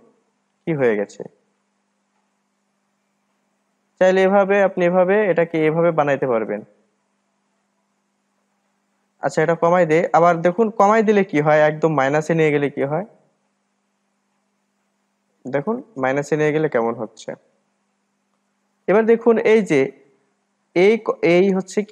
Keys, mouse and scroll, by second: 2.7-4.4 drag, 4.4-4.7 scroll down 4, 4.7-7.9 middle drag, 9.5-11.2 drag, 11.2-11.5 scroll up 2, 11.5-12.9 middle drag, 12.9-15.9 drag, 17.6-18.1 scroll up 2, 18.1-19.1 middle drag, 19.1-20.3 scroll up 2, 20.3-21.7 scroll up 1, 21.7-21.9 scroll up 1.